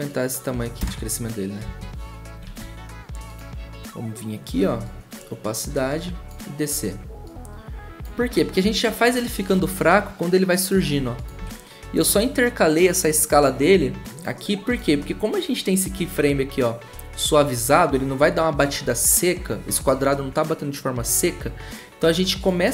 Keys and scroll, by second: 0.8 0, 2.2-2.9 typing, 11.4 s.